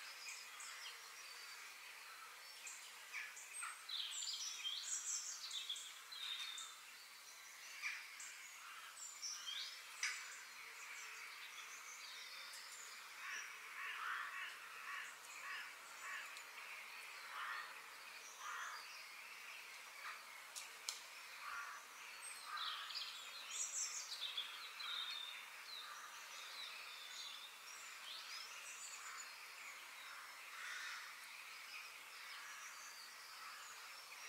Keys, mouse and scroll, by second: 0.4 KP_3, 1.1-3.0 middle drag, 3.6 f, 6.0-6.3 scroll up 2, 6.3-7.5 shift+middle drag, 7.5-8.4 scroll up 2, 8.4-9.4 scroll up 1, 9.4 scroll up 1, 13.1-14.9 middle drag, 16.7-18.6 middle drag, 20.9-21.2 scroll down 1, 21.2-23.1 middle drag, 23.1-23.4 scroll down 2, 23.4 middle click, 24.3 scroll down 2, 24.5 middle click, 25.2-26.5 scroll down 3, 26.5 click, 27.5 shift+click, 27.9-30.3 shift+middle drag, 30.3 g, 31.9-33.2 middle drag, 33.2 g.